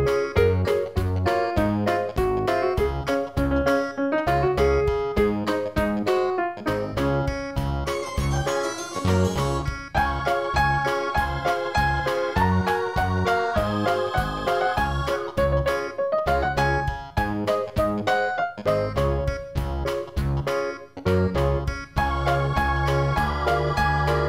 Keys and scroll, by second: 14.1 ctrl+i, 14.9 ctrl+0, 15.2 ctrl+-.